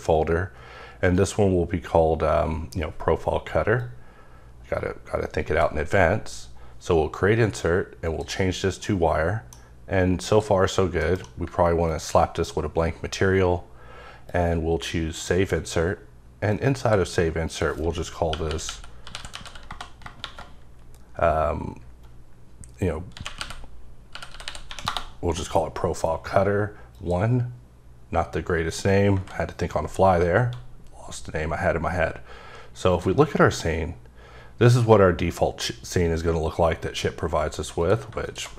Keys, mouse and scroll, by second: 1.1 click, 3.8 click, 8.0 click, 8.8 middle click, 10.2 click, 11.0 m, 11.9 ctrl+click, 16.5 click, 17.5 click, 18.3-19.4 typing, 23.1-24.6 typing, 24.9 Return, 26.9 click, 29.1 KP_0, 32.9 click, 37.8 click, 38.2 double click.